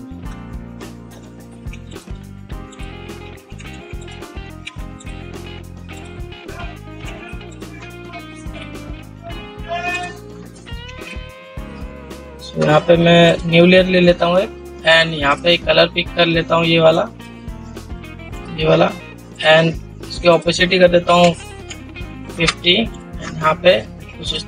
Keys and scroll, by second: 11.1 ctrl+z.